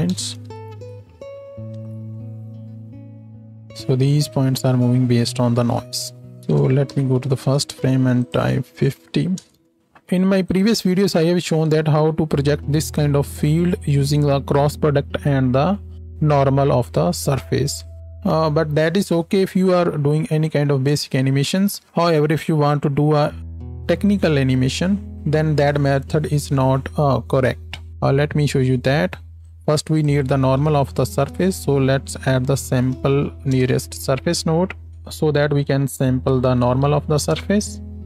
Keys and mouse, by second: 0.6 shift+Left, 1.0 space, 1.8 alt+a, 6.8 shift+Left, 9.8 click, 17.7-29.4 drag, 32.8 Down, 33.1 Down.